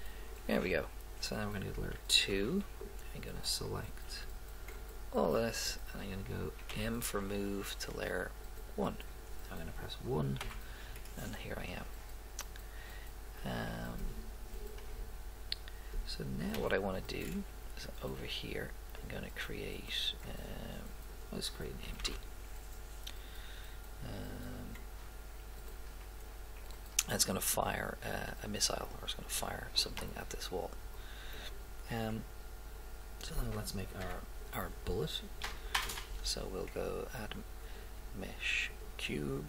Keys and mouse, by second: 2.3 2, 4.1 b, 6.7 m, 10.4 1, 11.0 middle click, 16.6 KP_7, 19.1 click, 22.0 shift+a, 28.0-29.8 middle drag, 34.0 KP_7, 35.8 shift+a.